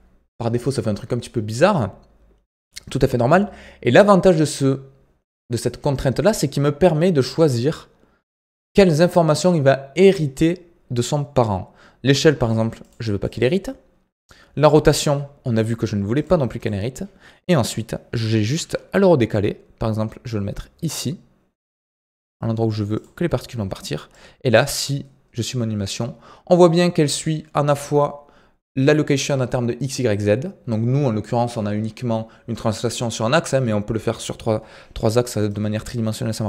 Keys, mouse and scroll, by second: 1.4 scroll up 2, 12.3-17.4 drag, 17.4 scroll up 2, 18.5 g, 24.1-27.1 drag, 35.4-36.4 drag.